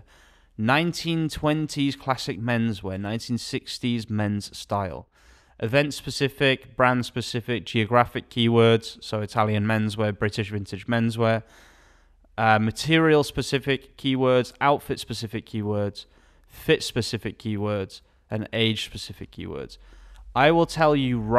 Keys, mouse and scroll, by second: 0.6 click, 0.7 alt+a, 18.9 alt+a.